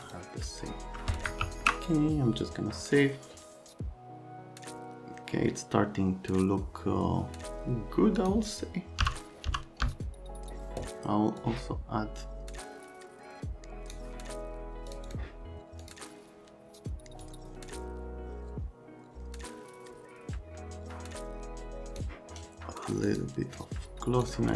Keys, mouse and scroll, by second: 0.1 click, 1.5 ctrl+s, 8.2 click, 9.0 n, 9.5 n, 9.9 n, 10.5 x, 11.4 Home, 12.0 click, 14.9 click, 15.1 click, 15.8 click, 17.3 click, 23.1 click, 24.3 click.